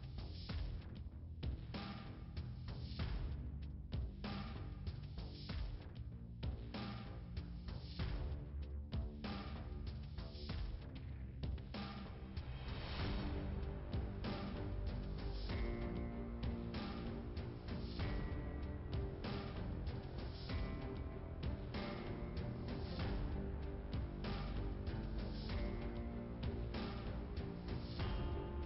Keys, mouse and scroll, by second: 1.2 click, 2.4 click, 3.3 click, 3.4 click, 7.5 click, 10.1 click, 10.3 click, 10.4 click, 13.6 middle click, 15.8 click, 18.4 click, 19.5 click, 21.3 click, 23.4 click, 24.7 click, 26.0 scroll up 1, 27.9 click.